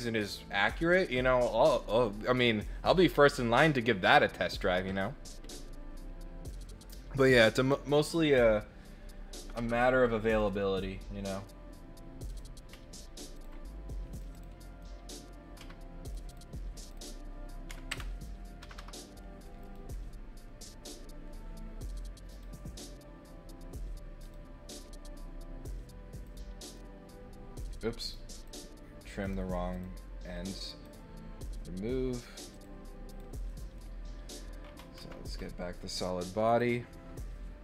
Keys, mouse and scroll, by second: 11.3 right click, 12.2 click, 13.3 ctrl+middle click, 14.1 click, 14.3 click, 14.6 right click, 16.0 click, 16.3 click, 16.8 click, 16.9 click, 19.6 click, 22.3 click, 24.2 click, 26.2 click, 26.6 right click, 28.0 click, 28.4 click, 29.7 click, 30.8 click, 32.5 click, 33.0 click, 33.4 middle click, 35.4 middle click, 36.4 click.